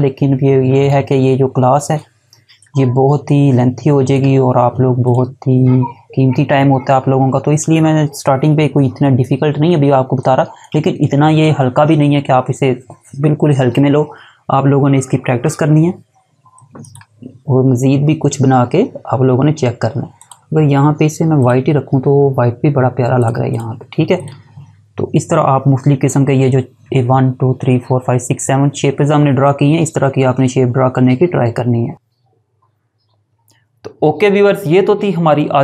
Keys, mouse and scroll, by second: 8.1 alt+scroll up 1, 9.1 space, 9.4 click, 16.1 click, 19.4 click.